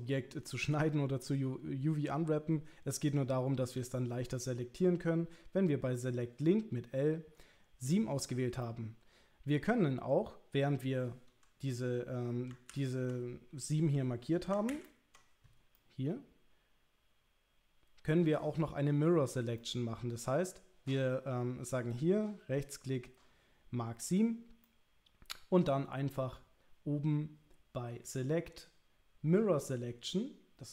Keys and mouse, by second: 3.1 click, 8.7 middle click, 12.7 ctrl+z, 14.7 ctrl+z, 15.8-18.4 middle drag, 19.6 middle click, 21.9-24.2 right drag, 24.6-25.7 middle drag, 28.1-30.7 drag.